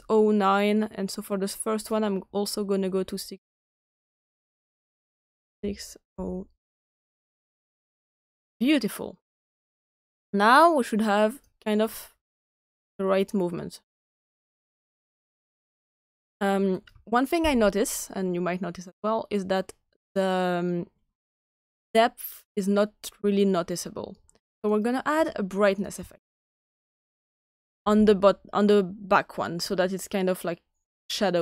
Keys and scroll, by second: 6.0-7.0 typing, 7.5 Return, 11.1-11.8 typing, 26.8-28.4 typing.